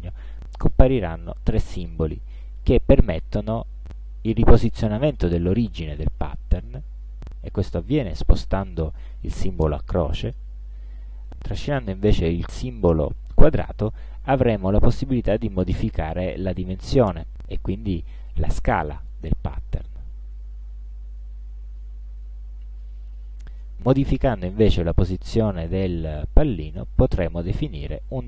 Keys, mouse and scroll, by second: 4.5-7.2 drag, 14.7-22.0 drag, 26.9-28.2 drag.